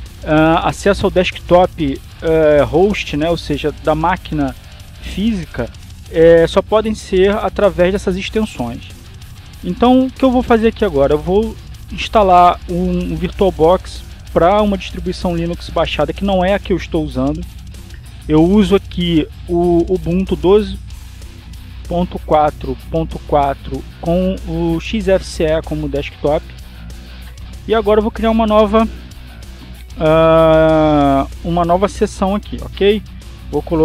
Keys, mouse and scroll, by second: 0.6 click, 29.5 click, 31.9 click.